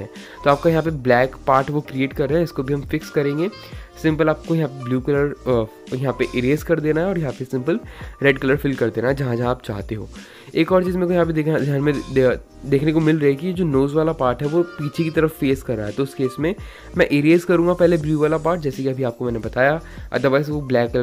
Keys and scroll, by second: 3.0 ctrl+z, 9.5 space.